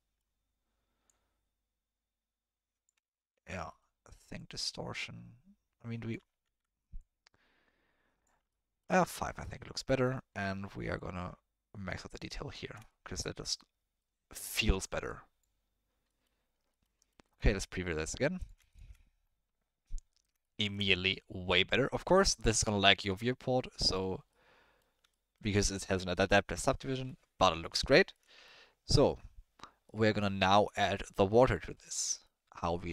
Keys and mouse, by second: 0.1 middle click, 1.0-2.8 drag, 3.3 ctrl+z, 3.7 middle click, 4.3-6.1 drag, 6.4 ctrl+z, 7.0-8.2 drag, 8.6 ctrl+middle click, 9.1-9.4 middle drag, 10.1 middle click, 11.0-12.1 drag, 12.8 shift+middle drag, 13.4-14.0 middle drag, 15.1 click, 16.0 middle click, 16.8 middle click, 18.0 middle click, 18.4 click, 18.7 ctrl+shift+click, 20.4 ctrl+drag, 20.5 shift+middle click, 20.6 ctrl+click, 20.7 middle click, 22.3-22.9 drag, 24.3-24.8 drag, 25.1 ctrl+click, 28.1-28.4 drag, 31.1 click, 31.5 click, 31.9 middle click.